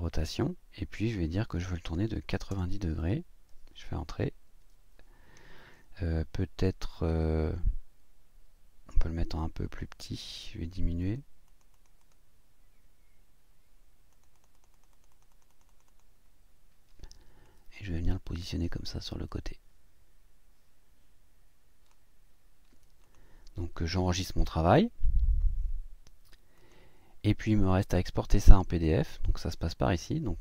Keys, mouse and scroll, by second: 1.0 click, 2.2 KP_9, 2.5 KP_0, 9.6 click, 11.0 click, 11.5 click, 14.1-16.2 drag, 17.4-22.1 drag, 23.0 click, 26.6 click.